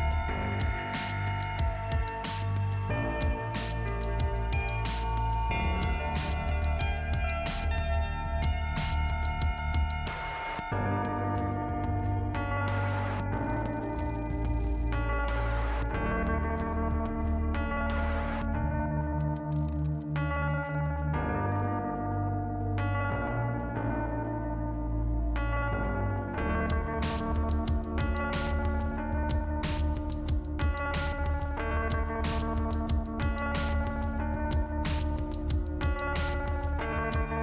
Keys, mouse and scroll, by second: 0.1 click, 2.6 click, 4.2 click, 4.9 click, 9.0 click, 9.1 click, 11.7 click, 12.9 click, 14.6 click, 16.6 click, 16.6 click, 17.7 click, 18.0 click, 18.1 click, 19.6 click, 21.6 click, 22.3 click, 25.6 click, 25.8 click, 27.9 click, 28.1 double click, 29.2 double click, 30.6 click, 31.6 click, 31.9 double click, 33.2 click, 34.5 click, 35.0-35.9 scroll down 1, 37.3-37.4 scroll up 2.